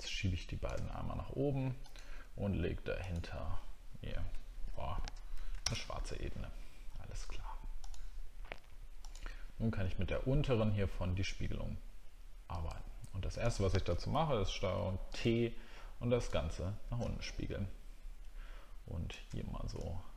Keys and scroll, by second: 14.1 ctrl+t.